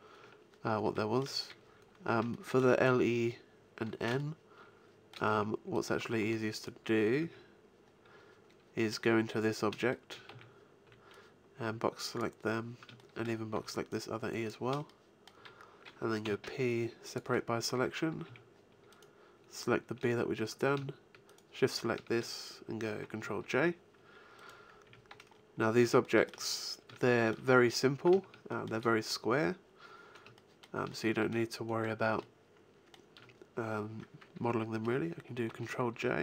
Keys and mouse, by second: 5.3 Tab, 6.2 Tab, 7.2 Tab, 10.3 a, 10.8 b, 13.5 b, 16.2 p, 18.2 Tab, 18.9 right click, 23.4 ctrl+j, 24.8 Tab, 25.4 click, 25.8 middle click, 35.4 ctrl+j.